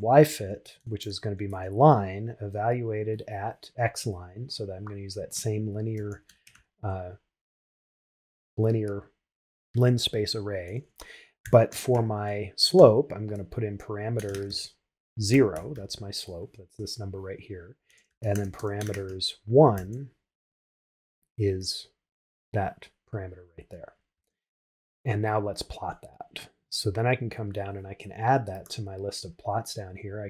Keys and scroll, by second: 1.5 shift+9, 24.2 shift+Return.